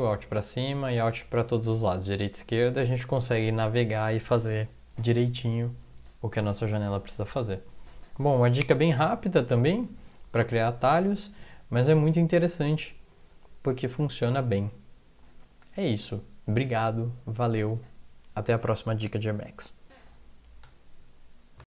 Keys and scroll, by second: 9.3 Up, 9.5 Up, 9.7 Up, 9.9 Up, 10.2 Up, 10.6 Down, 10.8 Down, 10.9 Down, 11.1 Down, 11.2 Down, 12.0 Down, 12.3 Down.